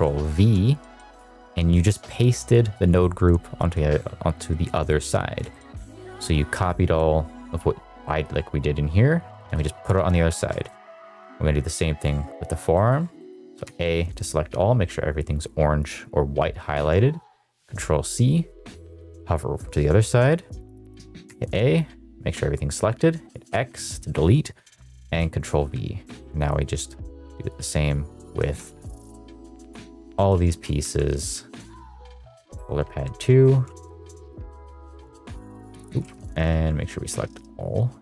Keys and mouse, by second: 0.4 ctrl+v, 0.9 g, 5.5 shift+middle click, 5.9 shift+middle drag, 8.0 middle drag, 9.3 shift+middle drag, 10.4 shift+middle click, 11.1 click, 12.3 middle click, 12.7 middle click, 13.2 middle click, 13.6 a, 17.5 ctrl+c, 18.9 click, 21.2 a, 23.5 x, 25.0 ctrl+v, 25.5 g, 27.4 click, 28.1 a, 28.7 ctrl+c, 29.9 a, 30.3 x, 30.8 ctrl+v, 31.1 g, 32.3 click, 32.8 a, 33.4 ctrl+c, 35.2 x.